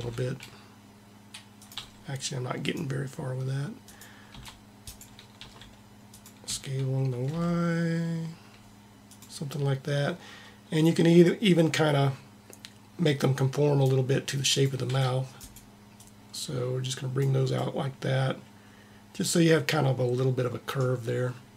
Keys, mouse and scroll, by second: 1.8 r, 2.8-5.6 drag, 4.3 c, 5.3 r, 6.4 s, 11.2-13.1 drag, 14.5-17.6 drag, 15.0 c, 17.6 middle click.